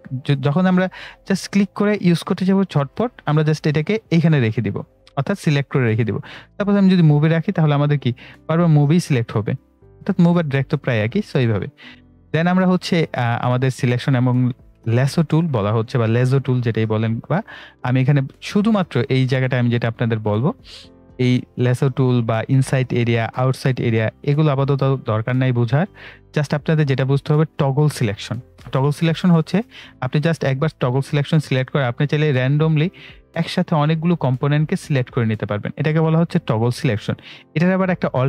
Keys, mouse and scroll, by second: 0.4 right click, 1.4 click, 1.4 click, 3.7 right click, 3.8 right click, 5.1-6.5 drag, 7.4 right click, 8.3 click, 10.0 right click, 28.5 click, 31.6 click.